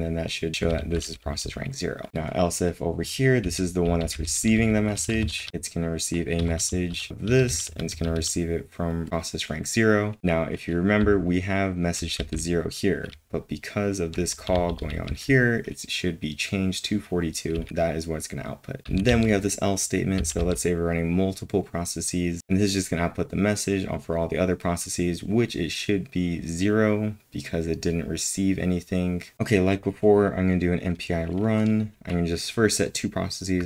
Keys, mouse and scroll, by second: 0.0-0.5 typing, 4.7-7.9 typing, 10.2 typing, 11.4-20.9 typing.